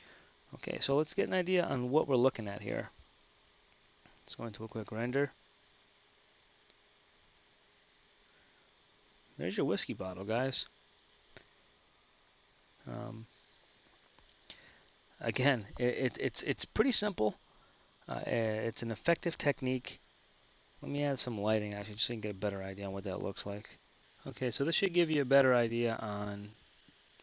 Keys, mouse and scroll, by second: 21.4 z.